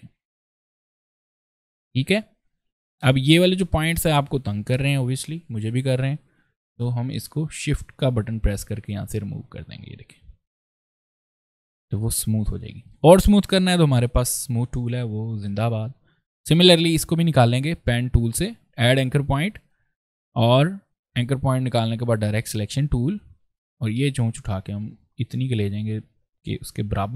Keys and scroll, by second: 10.9 v, 13.9 space.